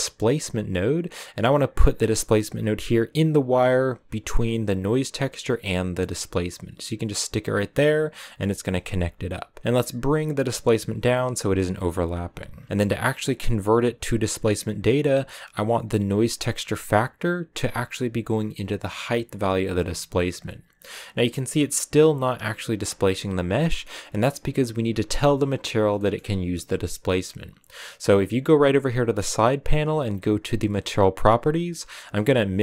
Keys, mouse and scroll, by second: 10.0 click, 15.5-19.2 drag, 32.0 click.